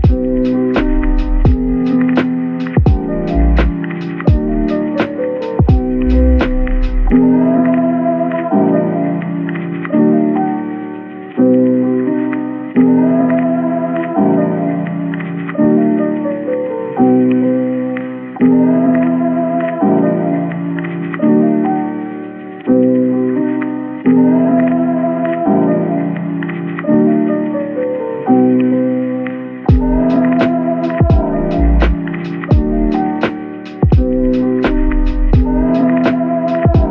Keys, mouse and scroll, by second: 3.4 middle click, 5.0 scroll down 1, 7.4 scroll up 1, 9.9 scroll down 1, 10.5 scroll up 1.